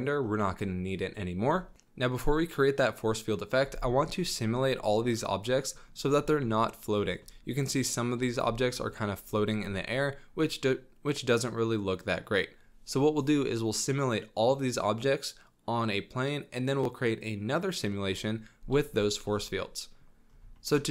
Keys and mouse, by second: 0.3-1.5 middle drag, 5.2-5.8 middle drag, 6.3 shift+middle drag, 6.6-7.1 middle drag, 7.2 shift+click, 7.2 shift+middle drag, 7.6 click, 7.7 middle drag, 7.8 drag, 8.1 shift+middle drag, 8.2 shift+click, 8.4-9.8 shift+middle drag, 9.8-11.2 drag, 11.0 middle click, 11.2 middle click, 11.2-11.6 drag, 11.4 middle click, 11.6 middle click, 11.6 drag, 11.8 middle click, 11.8-12.2 drag, 12.0 middle click, 12.2 middle drag, 19.1 middle drag, 19.5-20.0 middle drag, 19.5 click, 20.5 shift+middle click.